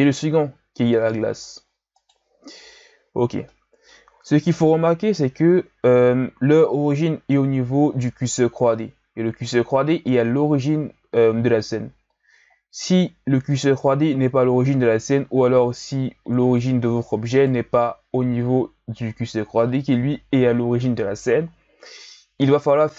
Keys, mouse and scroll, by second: 0.8 g, 3.4-4.4 middle drag, 4.4 KP_1, 5.5-6.5 scroll up 3, 6.5-9.6 scroll down 4, 16.5 right click, 17.3 right click.